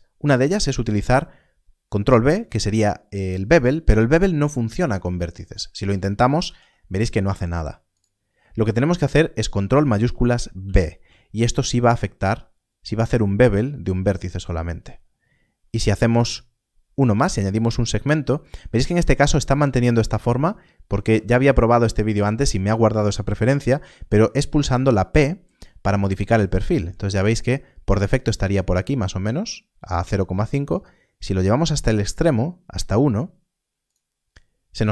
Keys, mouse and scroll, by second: 0.2 click, 6.3 ctrl+b, 7.9 right click, 10.6 ctrl+shift+b, 15.0-15.6 scroll up 1, 15.6-16.6 scroll down 1, 16.6-18.5 scroll up 1, 25.4-27.4 scroll, 33.8 click.